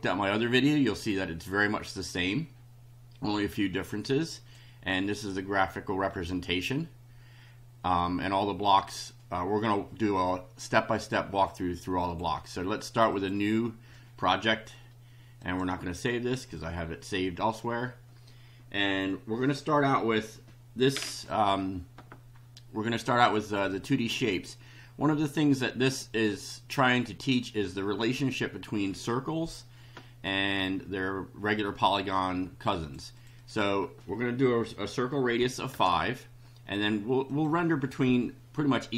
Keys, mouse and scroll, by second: 4.3 click, 12.0 click, 13.1 click, 15.4 click, 23.1 click, 26.8-28.2 drag, 32.0-33.0 drag, 33.1 click, 35.3 5, 35.7 Return, 37.2 click.